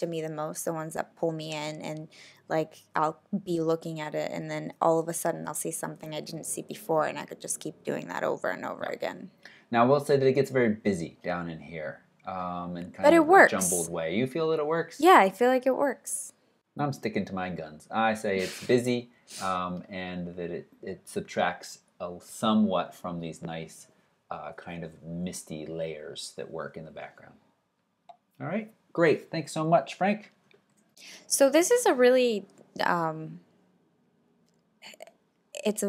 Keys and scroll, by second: 30.7 alt+super+Right.